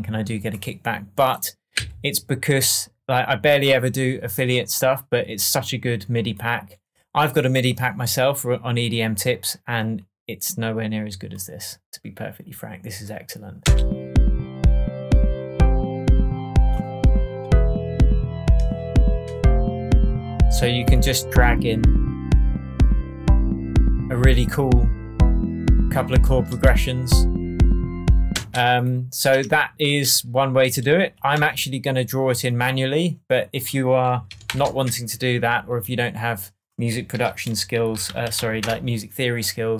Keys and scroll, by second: 1.7 Right, 5.1 Right, 13.6 space, 28.3 space, 29.2 BackSpace, 31.3 shift+BackSpace, 32.1 BackSpace, 34.4 shift+super+m, 35.3 shift+super+Tab, 37.1 super+r, 37.6-38.8 typing.